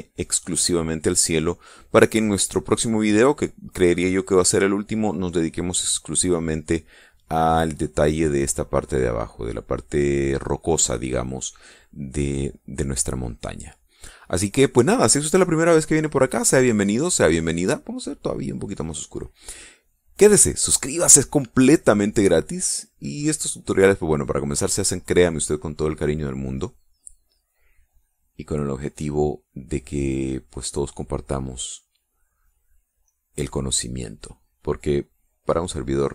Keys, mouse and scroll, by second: 2.2 middle click, 2.3 click, 2.7 middle click, 2.9-4.1 drag, 4.4-5.4 drag, 13.0-14.2 drag, 18.1-19.4 drag, 20.6 click, 21.2 click, 21.6 click, 22.6-27.0 drag, 27.7-33.3 drag, 33.6-36.1 drag.